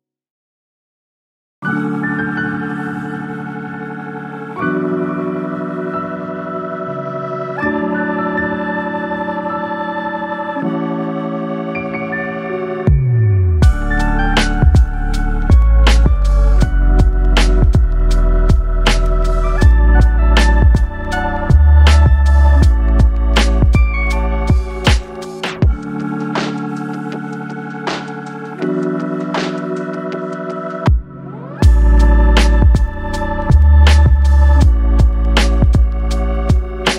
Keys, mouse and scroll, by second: 2.1 KP_0, 4.0 click, 5.4-7.6 drag, 8.7-10.6 middle drag, 10.6 click, 11.5 s, 13.3 KP_0, 14.6 drag, 15.9 click, 18.0 click, 20.2-20.9 drag, 21.9-23.6 drag, 23.6-24.3 middle drag, 24.3-25.1 scroll down 3, 25.1-27.4 middle drag, 27.7 right click, 29.2 click, 32.4-32.8 scroll up 1, 32.8-34.1 middle drag, 34.1-35.6 scroll up 2, 35.6 KP_0.